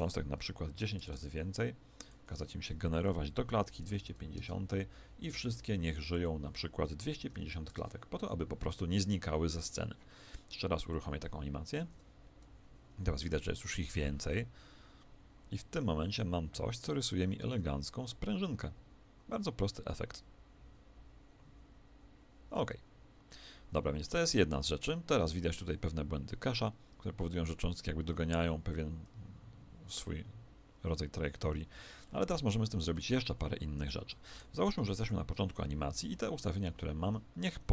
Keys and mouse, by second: 11.8 alt+a, 16.0-34.6 middle drag, 33.1 Escape, 34.9 shift+Left.